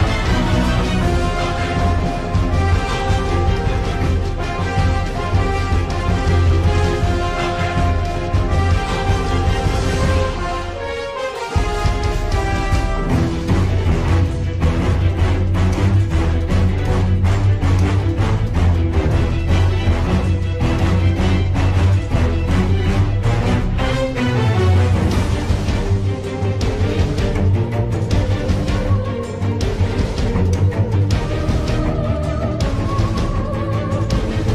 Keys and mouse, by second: 4.9 z, 15.4 click, 21.0 F2, 29.7 click, 30.7 F2.